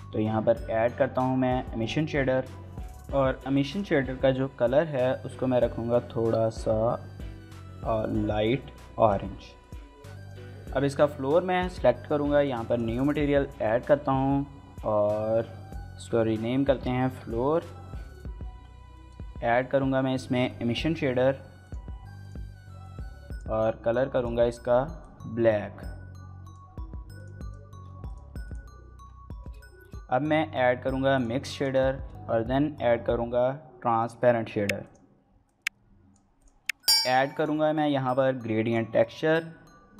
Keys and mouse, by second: 1.6 click, 33.9 shift+a.